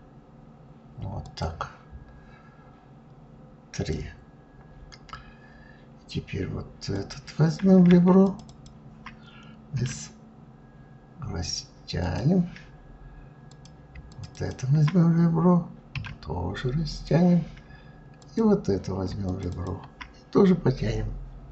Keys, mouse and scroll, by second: 6.7 click, 8.0 shift+click, 8.2 shift+click, 9.5 s, 13.2 click, 13.8 shift+click, 14.0 shift+click, 15.6 s, 17.9 click, 19.0 shift+click, 19.2 shift+click.